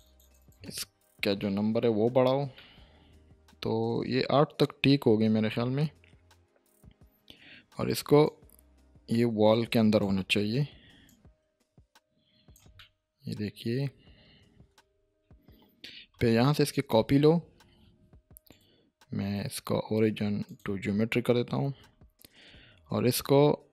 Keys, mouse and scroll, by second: 0.8-1.3 scroll down 1, 1.4-2.0 shift+middle click, 2.1-2.5 scroll up 1, 2.5-7.5 middle drag, 8.2-10.1 drag, 12.8-14.9 middle drag, 15.0-15.9 scroll down 1, 16.5 shift+d, 17.1 right click, 20.4 click, 22.4 r, 23.6-23.7 typing.